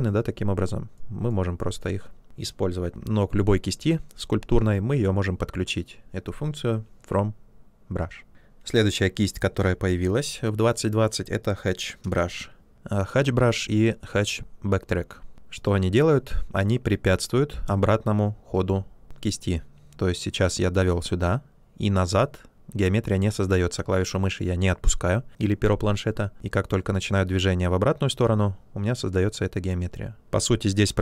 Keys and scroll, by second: 10.1 b, 12.3 h.